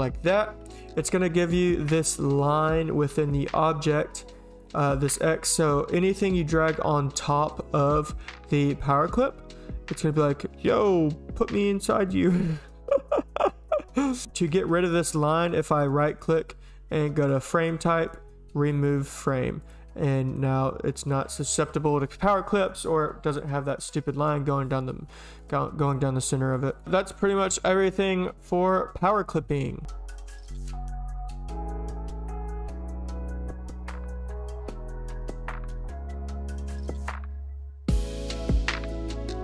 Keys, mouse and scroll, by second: 0.7 Delete, 4.5 click, 5.1 click, 6.1 click, 6.5 click, 7.5 click, 8.0 click, 8.5 click, 14.5 Delete, 19.2 click, 19.6 click, 20.1 click, 21.0 click, 23.3 click, 25.3 click, 26.4 click, 26.7 click, 27.5 Delete, 27.7 click.